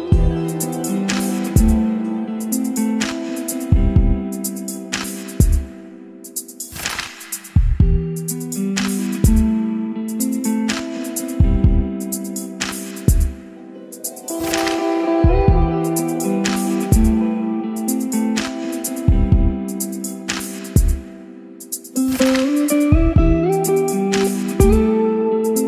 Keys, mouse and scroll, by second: 0.0-1.4 typing, 1.4 Return, 2.8-3.9 typing, 4.6 click, 5.9 ctrl+c, 6.1 Right, 6.4 Return, 6.6 ctrl+v, 7.4 click, 7.9-9.9 typing, 10.1 Down, 10.6 Return, 12.9-13.9 drag, 13.6-15.0 typing, 15.1 Down, 15.4 Return, 16.7-18.8 drag, 18.5-19.8 typing, 22.0-23.0 middle drag, 23.4 ctrl+r, 24.4-25.6 drag.